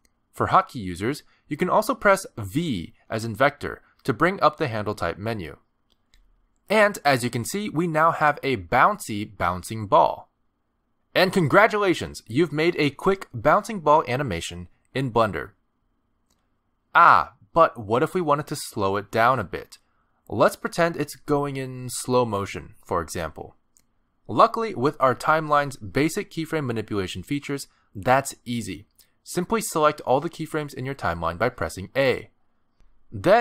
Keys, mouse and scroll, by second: 0.5 space, 2.6 space, 3.5 v, 6.7 space, 21.4 middle click, 22.6 a, 24.7-25.3 scroll down 1, 29.7 space, 30.1 click, 30.6 click, 31.6 a.